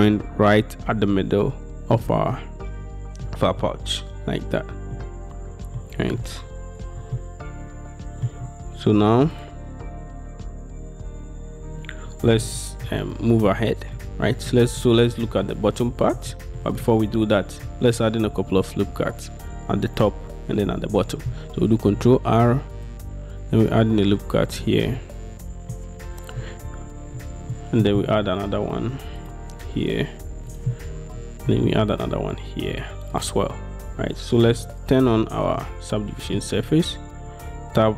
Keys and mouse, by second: 3.3 middle click, 5.0-7.2 middle drag, 7.2-8.3 shift+drag, 8.3-12.5 shift+middle drag, 12.7 shift+click, 13.5 click, 14.3 shift+click, 14.9 click, 15.3 click, 16.4 shift+middle click, 16.9 middle click, 21.9 ctrl+r, 24.6 click, 27.6 click, 28.2 ctrl+r, 30.6 click, 31.6 ctrl+r, 33.2 click, 35.7 middle click, 37.3 Tab.